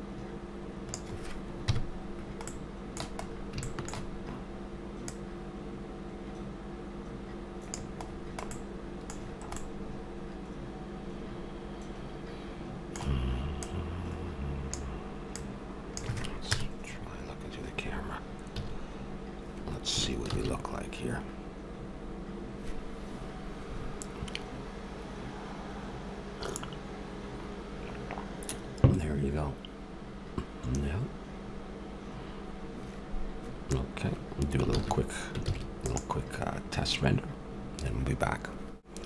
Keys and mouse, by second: 1.6 KP_Decimal, 8.1-9.8 middle drag, 10.0 middle click, 10.2-11.4 middle drag, 13.6-16.6 drag, 16.4 KP_0, 18.6 a, 20.6 shift+z, 34.7 shift+z, 35.4 ctrl+s.